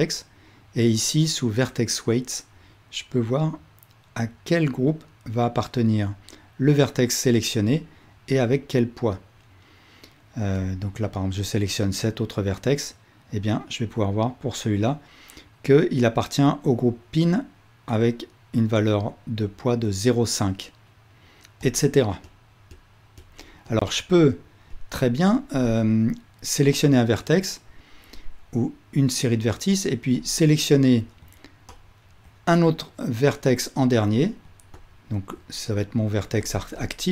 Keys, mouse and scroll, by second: 3.2-10.8 drag, 21.6 click, 22.3 click, 22.8 click, 23.3 click, 23.7 click, 24.8 click, 30.2-31.3 drag, 31.8-32.3 ctrl+drag.